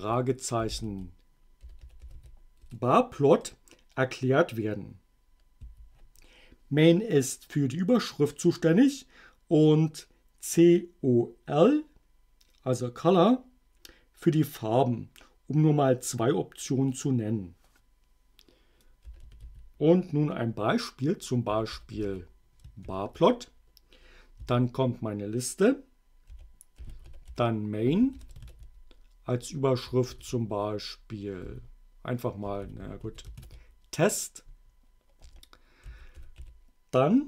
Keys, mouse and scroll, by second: 0.4-2.7 typing, 5.7 q, 18.9-20.0 typing, 21.3-22.9 typing, 24.4 a, 26.1-28.9 typing, 30.1 shift+t, 31.5-33.9 typing, 35.3 ,, 36.0 o, 36.4 l.